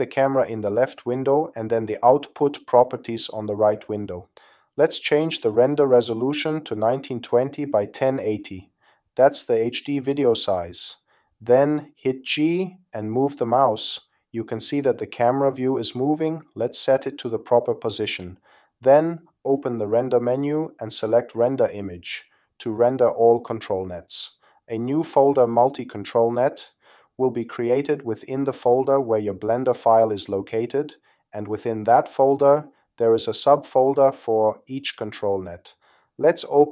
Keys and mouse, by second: 3.5-6.3 drag, 12.3 g, 15.9-17.1 drag, 17.3-22.7 drag.